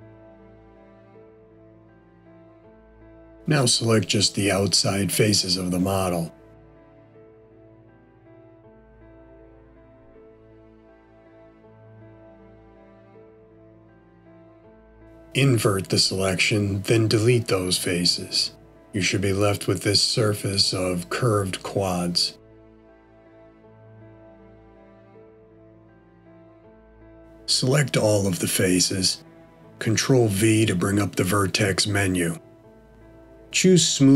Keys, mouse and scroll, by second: 0.7 middle click, 6.1 click, 7.2 alt+shift+click, 9.4 middle click, 15.9 ctrl+i, 18.5 x, 22.1 middle click, 29.3 a, 33.0 ctrl+v.